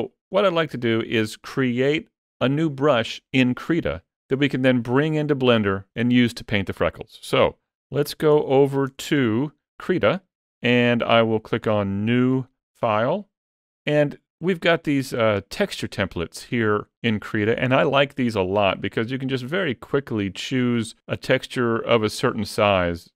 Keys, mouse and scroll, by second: 0.2 middle click.